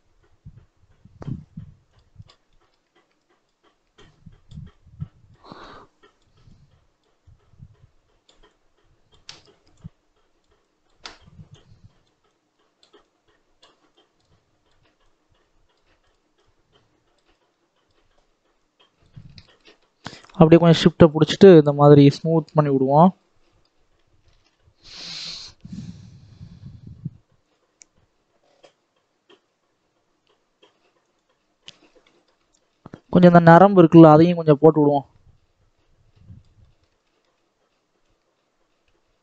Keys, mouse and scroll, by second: 0.0 click, 0.1-1.8 scroll up 1, 1.8 click, 2.4 shift+middle click, 3.0-22.5 drag, 22.5-23.0 scroll down 7, 23.0 middle click, 23.7-25.1 scroll up 1, 25.1 middle click, 25.3 scroll down 1, 25.5 middle click, 26.0 scroll up 1, 26.3-29.3 middle drag, 31.1 middle click, 31.5-31.9 scroll up 1, 31.9 middle click, 32.5-33.7 scroll up 2, 33.7-36.5 drag, 36.5 middle click, 37.2-37.9 scroll up 1, 37.9-39.2 drag.